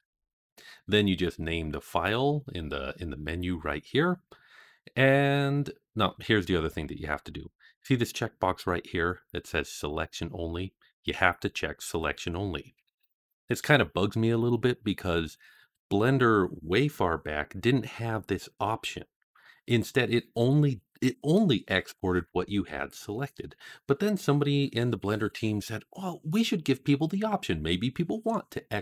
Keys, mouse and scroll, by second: 0.0 click.